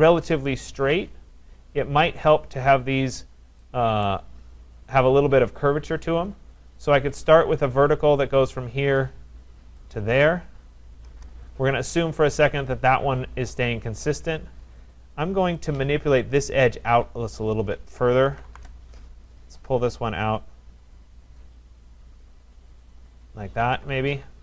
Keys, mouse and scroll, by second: 4.1 right click, 7.2 click, 8.5 click, 9.9 click, 11.1 Return, 15.1 scroll, 15.7 click, 16.1 middle click, 16.3 middle click, 17.5 click, 18.0-19.0 typing, 19.4 click, 22.4 click, 23.7 Escape, 24.0 Escape, 24.1 Escape.